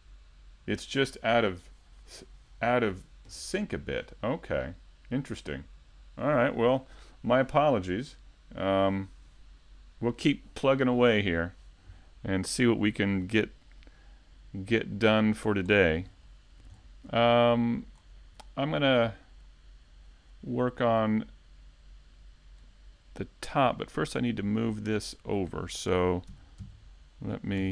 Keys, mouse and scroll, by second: 1.1 shift+right click, 1.4 middle click, 2.0 KP_3, 2.2 KP_5, 2.8 z, 3.0-3.4 scroll up 2, 3.4 shift+middle click, 3.9 shift+d, 6.6 click, 7.1 a, 7.7 middle click, 8.0 e, 9.4 Tab, 10.2 KP_5, 10.4 scroll down 2, 11.2 a, 11.4 a, 11.7 middle click, 13.0 middle click, 13.6 shift+middle click, 13.8 shift+middle click, 14.1 middle click, 27.5 middle click.